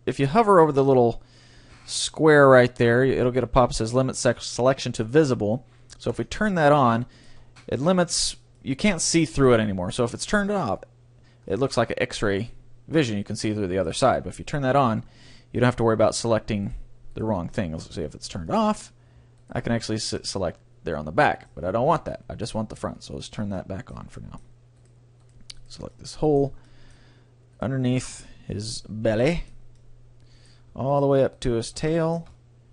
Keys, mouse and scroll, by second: 6.1-8.0 drag, 7.0 right click, 7.6-10.4 middle drag, 10.4-12.4 drag, 11.6-13.8 middle drag, 14.6-16.3 drag, 15.0 middle click, 15.8 right click, 16.6 middle click, 16.6-18.9 right drag, 18.5-20.6 drag, 19.4-21.2 right drag, 20.2-22.1 middle drag, 21.8 ctrl+z, 23.0-24.8 drag, 23.6-25.8 middle drag, 24.8-27.4 right drag, 26.0-31.6 middle drag, 27.6-29.6 right drag, 31.0-32.7 right drag, 32.0-32.7 middle drag.